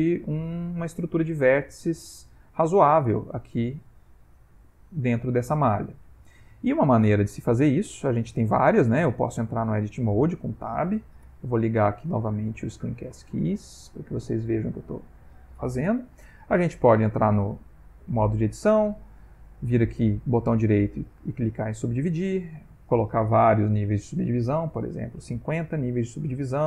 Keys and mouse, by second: 14.6 click, 15.6 middle click, 16.2 middle click, 16.8 middle click, 17.5 right click, 18.6 right click, 21.9 click, 22.7 click.